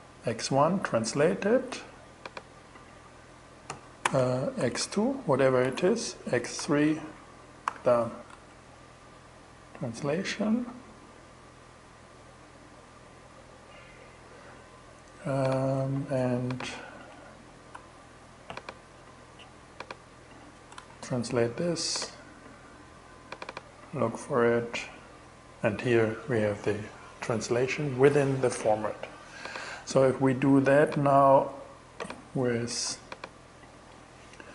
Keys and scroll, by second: 3.1-6.0 typing, 6.6 alt+3, 7.1 alt+6, 7.7 alt+shift+6, 8.4 shift+Return, 17.2 super+w, 20.2 shift+Return, 32.3 super+w.